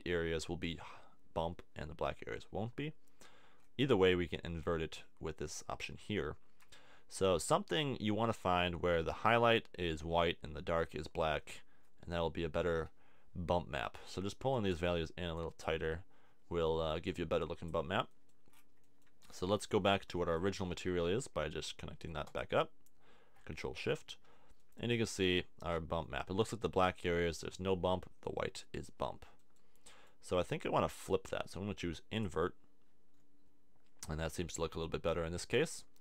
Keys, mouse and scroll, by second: 0.6 middle click, 3.6 middle click, 11.8-13.3 middle drag, 17.2 middle click, 17.4 right click, 24.3 middle click, 28.8 middle click, 34.0-36.0 middle drag.